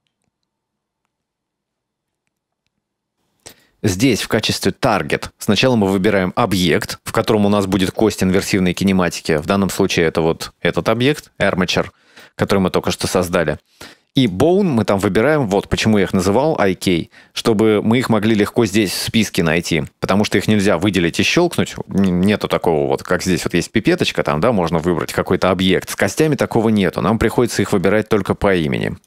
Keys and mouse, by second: 14.2-22.2 drag, 26.3-29.0 drag.